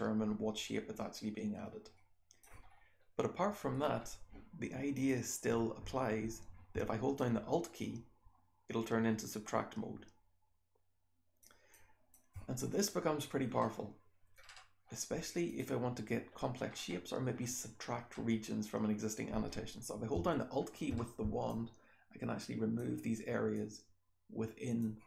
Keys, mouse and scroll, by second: 1.0-2.4 scroll up 1, 2.4 scroll up 1, 2.6-3.7 scroll down 1, 3.7 scroll down 1, 3.9-4.9 scroll up 1, 4.9 click, 4.9-6.4 scroll up 1, 6.4-7.7 scroll up 1, 7.1-11.4 alt+drag, 7.7-9.0 alt+scroll up 1, 9.0-10.4 alt+scroll up 1, 10.4-11.4 alt+scroll up 1, 11.4-12.6 alt+scroll up 1, 11.7 alt+click, 12.6-13.4 scroll down 1, 13.4-14.8 scroll up 1, 14.8-15.4 scroll down 2, 15.4 click, 15.4-16.6 scroll down 1, 16.6-17.2 scroll up 1, 17.2-18.0 scroll down 2, 18.0-20.0 scroll up 2, 20.0-20.8 scroll up 1, 20.8-22.4 scroll up 1, 21.4-22.7 alt+drag, 22.4-23.5 alt+scroll up 1, 23.5-24.7 alt+drag, 23.5-24.7 alt+scroll up 1, 24.7-25.0 alt+scroll up 1.